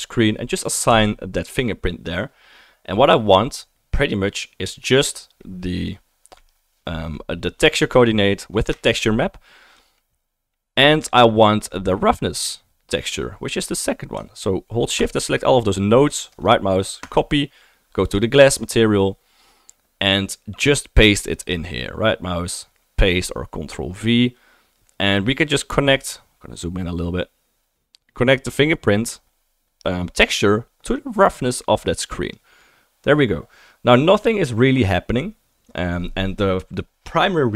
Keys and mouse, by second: 1.3 typing, 8.7 shift+click, 9.0-15.0 shift+drag, 15.2 shift+click, 18.1-20.3 drag, 21.3 click, 28.3 click, 34.1-36.7 middle drag.